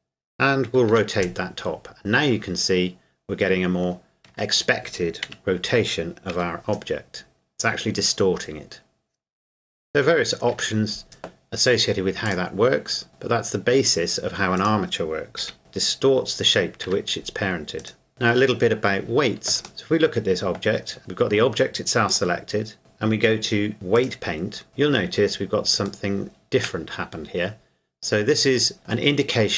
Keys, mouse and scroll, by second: 0.9 r, 4.3 Escape, 5.3 KP_1, 6.4 r, 10.5 Escape, 12.3 click, 14.6 right click, 15.4 r, 16.8 Escape, 17.8 right click, 18.1 scroll down 1, 19.5 shift+Num_Lock, 19.5 scroll down 1, 19.7 right click, 22.1 click, 23.9 click, 24.7-25.2 scroll up 1, 26.1 shift+middle click.